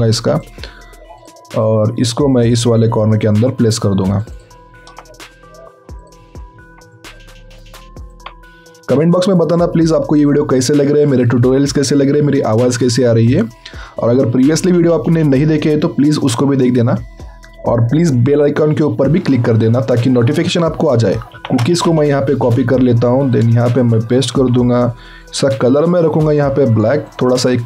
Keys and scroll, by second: 21.3 ctrl+c, 21.6 alt+Tab, 23.7 ctrl+v, 24.3 ctrl+a.